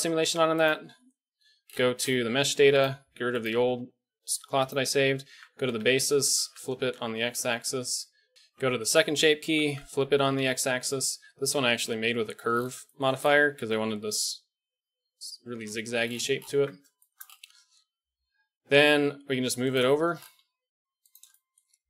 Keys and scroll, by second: 5.2 Tab, 5.6 a, 5.8 a, 6.2 s, 7.6 Tab, 8.5 Tab, 9.4 s, 11.5 KP_Decimal, 11.9 KP_7, 15.5 KP_1, 16.5 Tab, 19.1 g, 20.3 g.